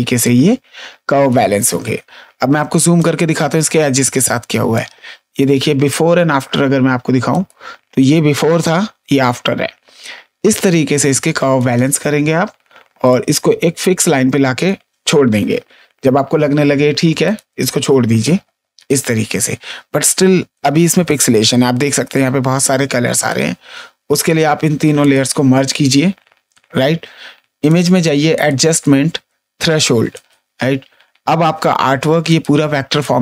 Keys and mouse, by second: 0.1 click, 2.3 space, 2.9 click, 4.1 ctrl+space, 4.7 click, 7.2 click, 8.4 click, 10.4 click, 13.0 click, 17.2 click, 19.4 space, 20.0 click, 22.0 ctrl+space, 22.0 click, 23.2 ctrl+space, 24.1 click, 25.4 ctrl+e, 27.6 click, 30.1 click, 32.2 click, 32.6 ctrl+space, 33.0 click.